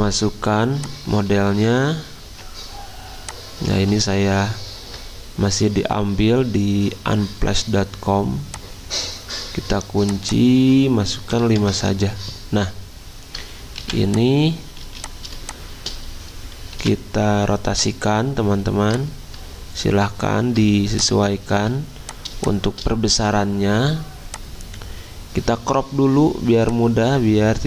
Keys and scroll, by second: 1.4 alt+Tab, 4.0 alt+Tab, 11.3 5, 11.6-15.3 Return, 13.8 v, 14.9 z, 16.7 v, 21.5 z.